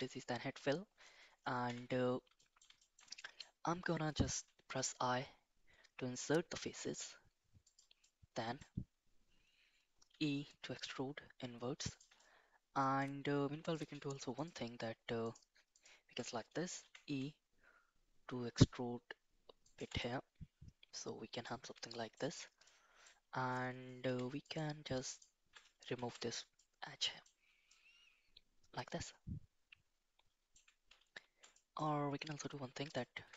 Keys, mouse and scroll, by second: 1.7 /, 2.4 middle click, 2.8 middle click, 3.2 middle click, 4.8 i, 8.0 middle click, 10.1 e, 12.2 middle click, 13.7 click, 14.3 alt+click, 15.2 alt+click, 15.7 alt+click, 16.8 e, 20.0-21.4 middle drag, 21.9 shift+middle click, 22.7 middle click, 24.0 2, 24.4 click, 25.1 alt+click, 25.9 ctrl+x, 26.5 middle click, 27.7-30.5 middle drag, 31.0 ctrl+z, 31.5 middle click, 32.8 alt+shift+click.